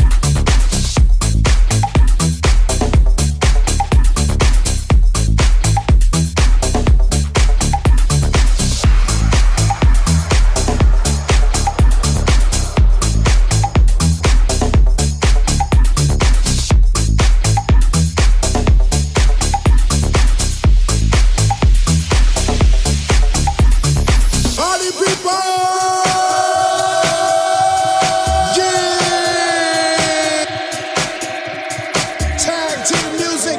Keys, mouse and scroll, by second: 5.5 /, 6.3 Tab, 10.5-21.5 middle drag, 21.6-27.6 middle drag, 23.2 ctrl+s, 27.6 right click, 27.6-32.0 middle drag, 32.0-33.5 drag.